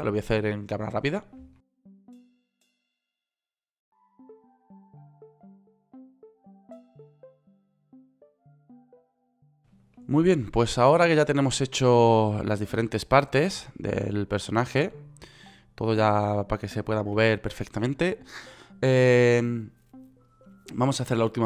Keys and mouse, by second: 1.4 click, 1.9 ctrl+p, 2.5 ctrl+p, 3.2 g, 3.6 ctrl+z, 3.9 g, 4.8 right click, 5.3 g, 5.5 ctrl+z, 5.9 ctrl+z, 6.0 click, 6.3 right click, 6.4 click, 6.4 right click, 6.6 ctrl+p, 7.2 ctrl+p, 7.9 ctrl+p, 8.4 ctrl+p, 8.9 ctrl+p, 14.1 g, 17.8 ctrl+z.